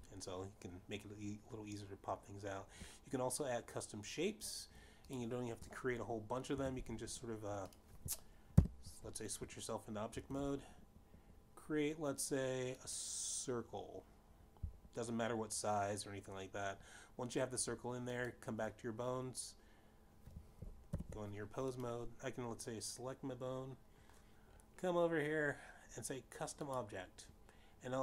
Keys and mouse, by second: 1.5 click, 1.7 click, 8.0 click, 9.4 shift+a, 10.5 click, 10.8 alt+o, 12.9 shift+a, 15.4 click, 21.4 click, 23.4 ctrl+alt+p, 24.1 click.